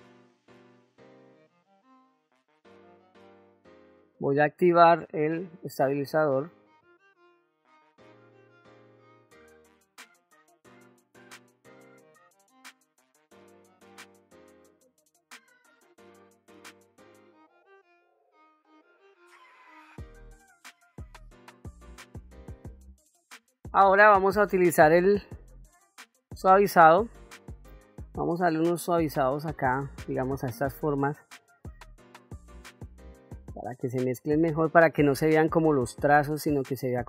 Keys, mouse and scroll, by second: 0.6 shift+middle click, 0.7 ctrl+middle click, 1.1 click, 1.7 click, 2.3 click, 2.4 click, 3.1 ctrl+middle click, 4.5-5.8 drag, 6.7 ctrl+middle click, 7.8 click, 8.3 click, 8.5 click, 9.0 click, 9.3 click, 9.8 f, 10.0 middle click, 10.2 click, 10.6 click, 10.9 middle click, 11.1 ctrl+middle click, 11.6 click, 12.0 click, 12.2 click, 12.4 click, 12.6 click, 12.8 click, 13.0 click, 13.1 click, 13.3 click, 13.5 middle click, 13.7 middle click, 13.9 shift+middle click, 14.0 middle click, 14.3 click, 14.5 middle click, 14.8 click, 15.0 click, 15.5 click, 16.1 click, 16.4 click, 16.7 f, 16.9-18.1 drag, 18.2 click, 19.2 click, 19.8 middle click, 20.1 ctrl+middle click, 20.3 shift+middle click, 20.5 f, 21.0 click, 21.9 middle click, 22.1 click, 22.5 middle click, 22.7 ctrl+middle click, 23.4 ctrl+middle click, 24.9 click, 25.7 shift+middle click, 26.2 middle click, 27.2 ctrl+middle click, 27.9 shift+middle click, 28.7 middle click, 30.4 f, 31.4-37.0 drag.